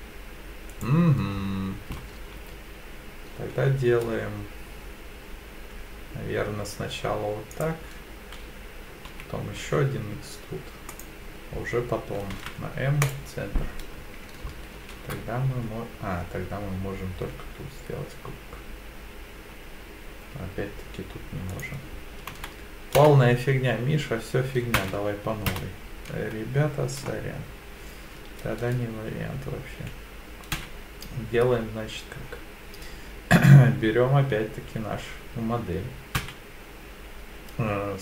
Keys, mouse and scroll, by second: 2.4 s, 7.5 click, 9.1 e, 9.6 s, 10.9 click, 12.3 m, 14.7 ctrl+r, 22.3 ctrl+z, 23.0 ctrl+z, 25.5 ctrl+z, 30.6 e, 36.2 s.